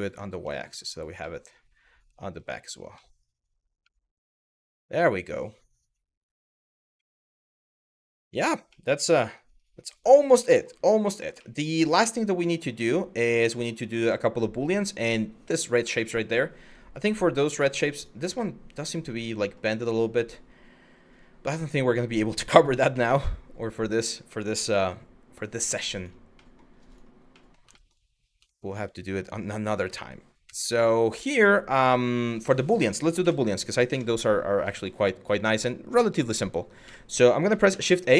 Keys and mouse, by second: 0.1 middle drag, 0.4 click, 0.8-2.0 middle drag, 2.7 middle drag, 3.6 middle drag, 6.7-7.6 middle drag, 8.3 middle drag, 8.9 shift+middle click, 9.6 click, 10.1 middle drag, 11.1 middle click, 15.7 middle click, 17.3 shift+middle click, 18.0-19.2 middle drag, 19.4 click, 21.6 middle drag, 22.5 KP_1, 23.5 click, 24.3 g, 25.6 click, 26.1 middle drag, 27.0 middle drag, 27.4 shift+middle drag, 28.2 shift+middle click, 30.1 KP_1, 33.5 KP_3, 34.4 middle click, 35.0 middle click, 36.5 KP_1, 37.3 shift+a.